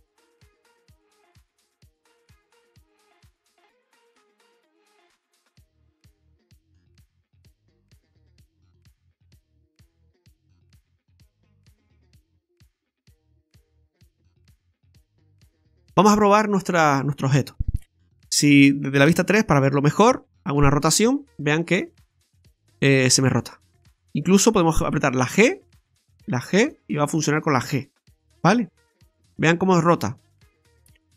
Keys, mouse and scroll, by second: 0.8 click, 2.3 click, 8.4 click, 10.2 click, 12.6 click, 15.8-16.3 scroll down 1, 16.3 middle click, 16.3 scroll down 1, 17.8 right click, 19.1 KP_3, 20.6 r, 23.1 g, 24.9 g, 25.9 right click, 26.1 g, 27.4 right click, 27.5 g, 30.3 g.